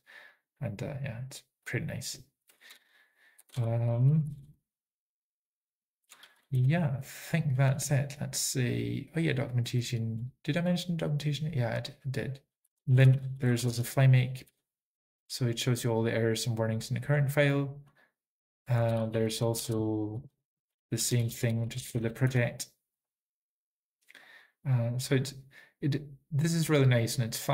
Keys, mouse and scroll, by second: 0.3-0.9 typing, 1.0-1.5 scroll up 3, 1.8 click, 3.6 ctrl+a, 6.3 ctrl+n, 6.3 typing, 9.7 ctrl+a, 9.7 ctrl+n, 9.7 typing, 12.7 Return, 12.7 alt+x, 13.1 scroll up 2, 13.1 typing, 14.3-15.1 typing, 16.5-17.1 typing, 17.2 click, 18.0 click, 19.7 alt+x, 22.3 Return, 22.3 typing, 24.5 click.